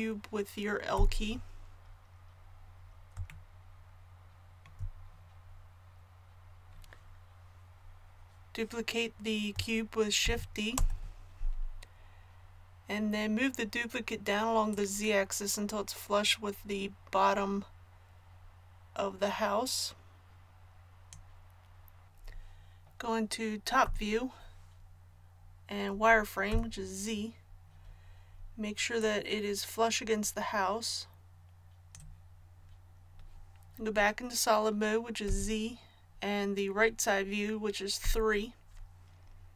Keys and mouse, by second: 2.1-10.2 drag, 10.2 shift+d, 14.6-23.8 drag, 23.8 KP_7, 26.5 z, 29.0-30.9 drag, 35.3 z, 38.0 KP_3.